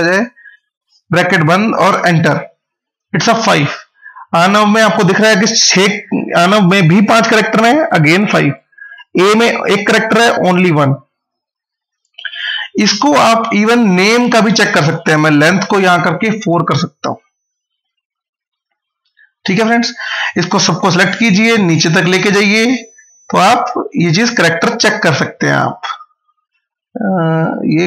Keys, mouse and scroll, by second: 0.2 0, 1.7 Return, 3.3-7.2 drag, 12.6 click, 17.6 ctrl+z, 19.3 click, 25.4 click.